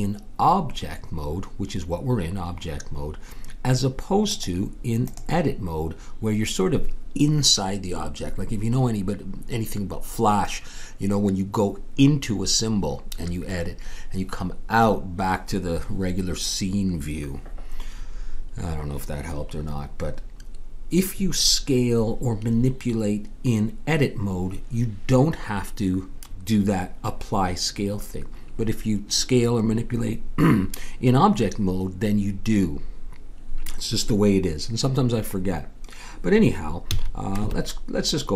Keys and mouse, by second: 4.3-7.4 drag, 36.9 a, 37.4 Tab.